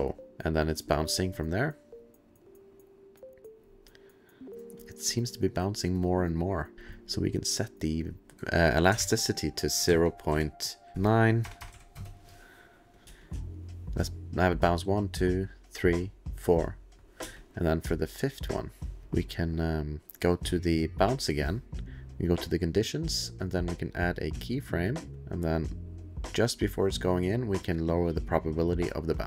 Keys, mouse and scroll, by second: 5.2 space, 6.0 click, 6.5 click, 6.7 click, 9.0 ctrl+a, 9.8 KP_0, 10.3 ., 11.0 KP_8, 11.2 KP_Enter, 12.2 KP_Enter, 12.2 BackSpace, 12.2 KP_9, 13.0 click, 13.0 click, 13.0 space, 17.2 space, 17.9 click, 19.0 click, 19.0 click, 21.1 click, 22.3 click, 24.6 click, 25.1 click, 25.4 click, 28.0 click.